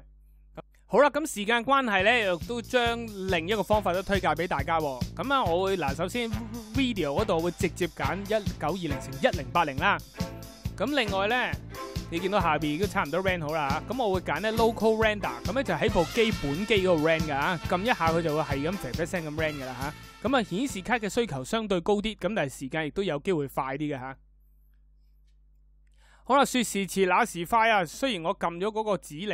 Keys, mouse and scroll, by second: 19.6 click.